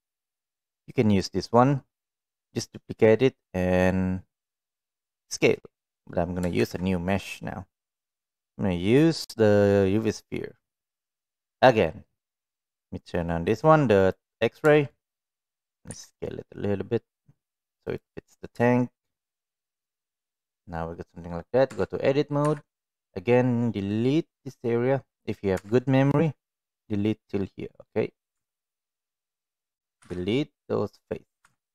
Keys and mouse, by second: 14.0 click, 15.9 s, 18.6-19.1 shift+middle drag, 21.6 Tab, 22.4 3, 22.9-25.3 drag, 28.4 Tab, 29.9 Delete, 31.4 Tab.